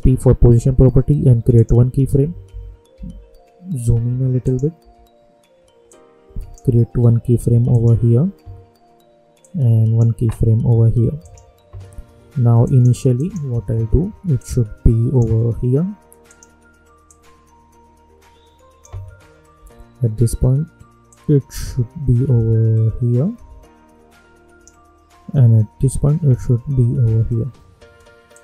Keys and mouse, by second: 2.5 =, 3.0 =, 4.0 =, 4.4 click, 4.8 =, 5.8-19.5 drag, 19.5 k, 21.0-25.7 drag, 25.7 k, 28.3 click.